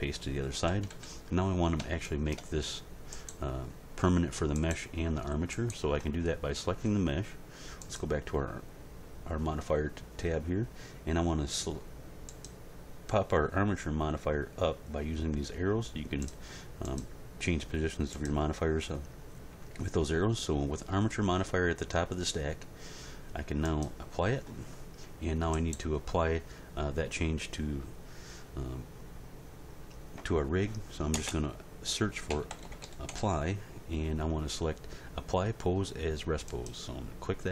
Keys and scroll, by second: 0.7 End, 0.9 Page_Down, 31.1 space, 32.3 a, 32.5 p, 32.8 l, 33.1 y.